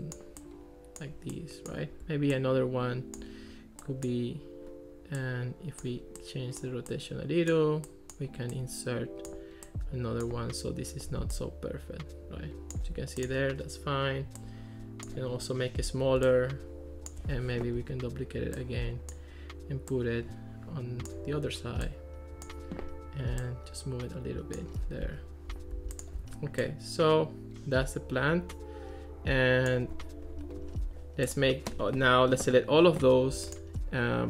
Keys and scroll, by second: 17.8 super+d.